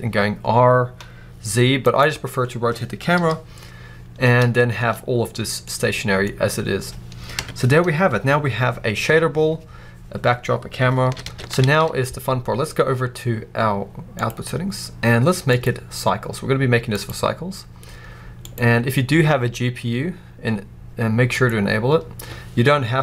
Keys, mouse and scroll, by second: 1.8 right click, 3.1 KP_7, 3.8-4.5 scroll down 2, 4.5-5.5 scroll down 1, 5.5-6.1 middle drag, 6.1-7.2 scroll up 2, 7.2 KP_0, 9.0 scroll up 2, 9.6 scroll down 1, 11.0 ctrl+s, 11.5 alt+a, 14.1 click, 15.4-23.0 drag.